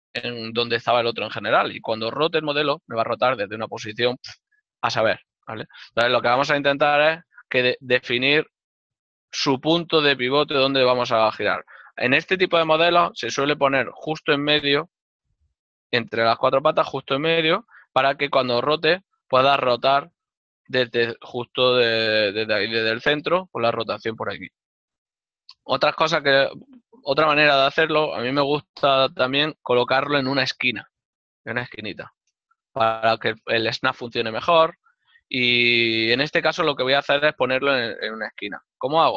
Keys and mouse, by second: 4.3 right click, 36.3 middle click, 37.6 Tab.